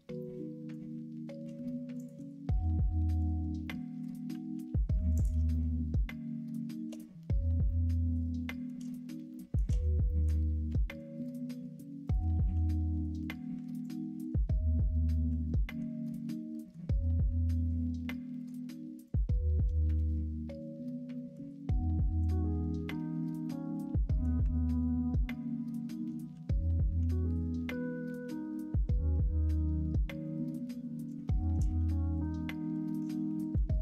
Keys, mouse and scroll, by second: 0.1 middle click, 2.3 x, 3.6 middle click, 4.5-5.3 typing, 5.1 alt+click, 5.4-6.9 middle drag, 7.6 middle click, 9.2 shift+middle click, 10.0 middle click, 10.6 2, 11.2 alt+click, 12.0 alt+shift+click, 12.3 x, 13.8 alt+click, 15.2 f, 15.6 middle click, 16.5 middle click, 17.6 middle click, 19.0 alt+click, 19.8 middle click, 21.1 middle click, 22.2 click, 23.4 middle click, 24.0 middle click, 24.7 alt+click, 26.3 f, 27.5 1, 28.6 shift+click, 29.3 m, 31.2 middle click, 32.0 click, 33.1 2.